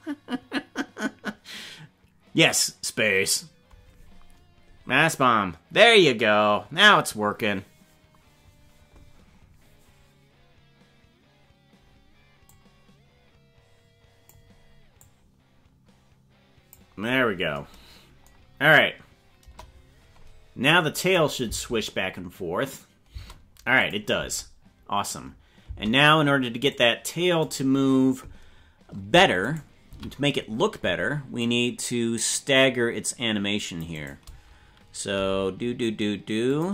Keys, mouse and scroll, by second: 12.4-14.2 drag, 15.0-16.7 drag, 19.3 KP_0, 21.0 click, 21.4 space, 23.1 space, 23.7 click, 24.1 space, 25.6 space, 26.7 click, 29.3 right click, 29.8 c, 35.1 g.